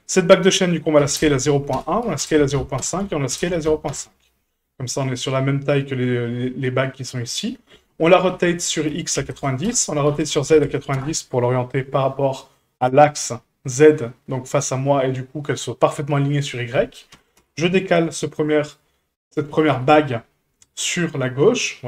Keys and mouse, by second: 1.0 s, 2.0 s, 4.7-5.3 middle drag, 6.2-6.6 middle drag, 7.2 middle drag, 8.3 r, 10.0 r, 17.1 g, 19.2 middle click, 19.7 g.